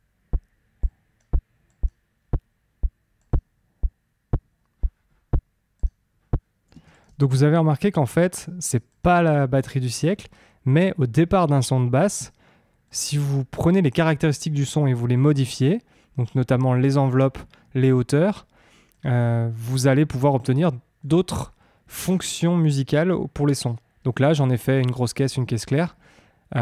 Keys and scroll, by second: 6.6 space.